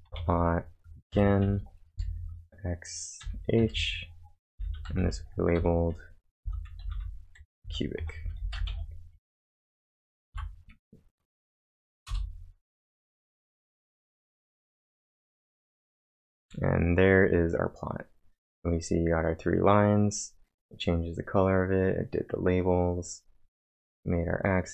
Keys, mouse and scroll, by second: 0.0-6.4 typing, 8.0-8.7 typing, 9.3 ctrl+`, 10.3 Up, 12.1 Return, 16.6-17.4 typing, 16.9-20.0 drag.